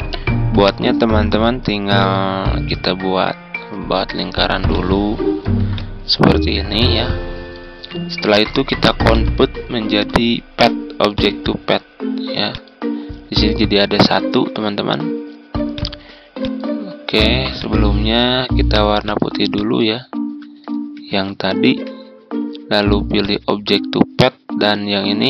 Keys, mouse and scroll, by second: 2.9 ctrl+scroll up 1, 4.6 ctrl+click, 5.7-7.9 drag, 21.1 Home, 23.1-25.2 drag.